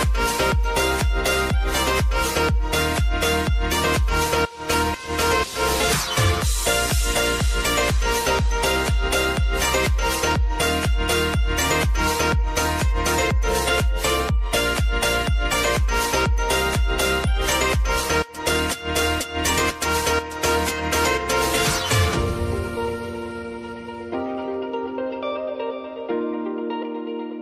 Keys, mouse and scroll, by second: 0.3 click, 1.9 space, 3.6 [, 4.9 click, 5.4 space, 7.4 [, 8.3 space, 9.0 click, 9.6 [, 10.0 space, 12.1-13.9 drag, 13.9 space, 19.0 click, 25.7 Return, 26.8 click.